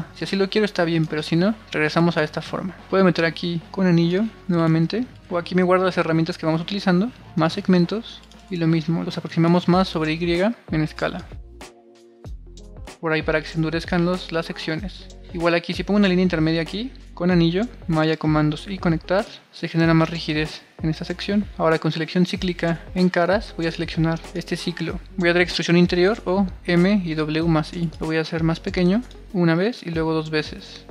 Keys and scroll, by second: 1.5 super+r, 10.6 super+r, 12.4 super+r, 19.6 super+r.